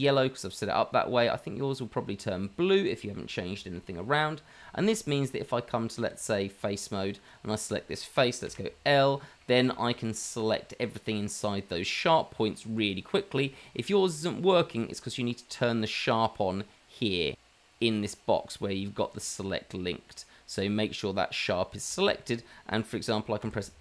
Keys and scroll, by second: 6.1 Tab, 8.5 l, 9.9 l, 23.4 f.